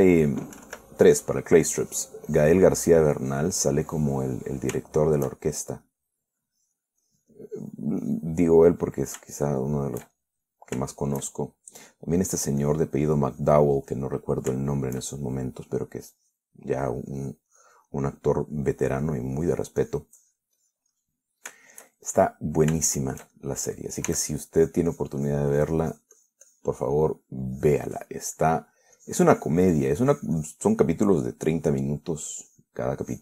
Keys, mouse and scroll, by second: 0.1-1.1 shift+middle drag, 1.8 3, 3.0 click, 3.6 click, 4.5 click, 4.9 middle click, 5.5 scroll up 1, 5.6-7.3 middle drag, 7.7 click, 8.3 click, 9.1 click, 9.3 click, 9.6 middle click, 10.8 shift+middle click, 11.7 middle click, 12.1 shift+middle click, 13.4 click, 13.9-15.1 drag, 15.1 middle click, 16.7 middle click, 17.4 click, 18.0-19.1 drag, 19.1 middle click, 19.7 scroll up 1, 19.9 middle click, 20.4 scroll up 1, 20.6-21.8 drag, 22.1 click, 22.2 middle click, 23.0 shift+middle click, 24.1-25.3 shift+middle drag, 25.3 s, 25.9-28.1 drag, 28.1 middle click, 28.8 click, 29.6 middle click, 30.2 click, 31.7 click, 32.3-33.2 drag.